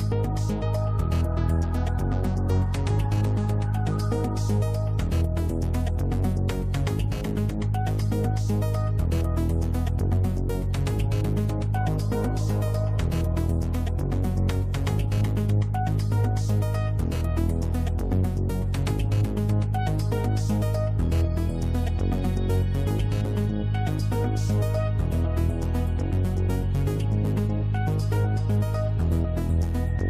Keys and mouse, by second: 4.0-4.8 drag, 6.7 click, 7.8-15.4 drag, 15.4 middle click, 17.4 middle click, 19.0-19.6 middle drag, 20.3 middle click, 21.1-21.5 middle drag, 21.9-22.3 middle drag, 23.5-27.8 drag.